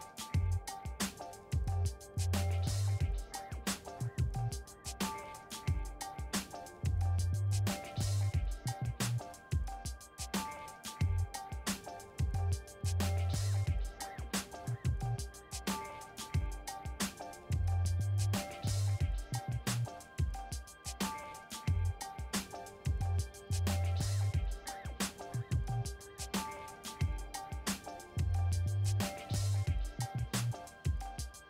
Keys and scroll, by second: 12.3-13.2 typing, 13.9 Return, 18.0 shift+j, 19.0-21.0 typing, 22.4 ctrl+a, 22.7 v, 25.5 ctrl+d, 27.7 t, 31.1-31.4 typing.